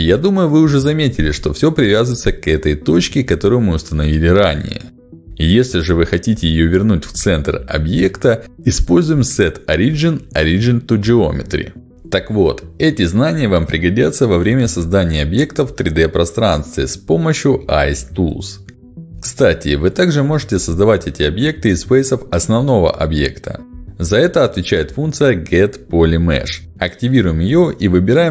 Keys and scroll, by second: 12.3 Delete, 15.1 ctrl+alt+x, 16.3 Escape, 17.0 ctrl+shift+x, 20.3 3, 21.2 space, 22.5 space, 25.5 Delete, 26.6 ctrl+shift+x.